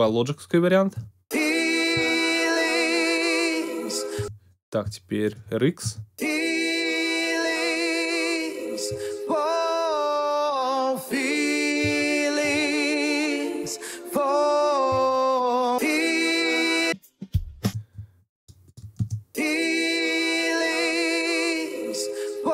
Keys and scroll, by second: 0.9 space, 4.1 space, 4.8 alt+space, 5.8 alt+space, 6.5 space, 17.6 alt+space, 19.0 alt+space, 19.9 space.